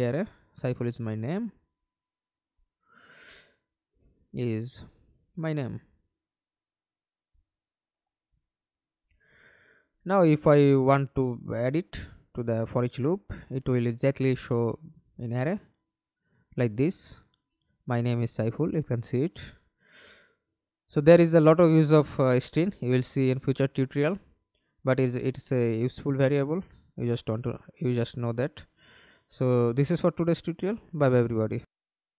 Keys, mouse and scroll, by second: 0.6-3.1 typing, 4.6 i, 6.3-8.1 typing, 11.2 double click, 14.6 double click, 15.5 middle click, 16.4 F11, 16.8 alt+p, 20.8 Escape, 21.5 middle click, 23.6 alt+p, 28.2-30.3 typing, 31.9 alt+F9.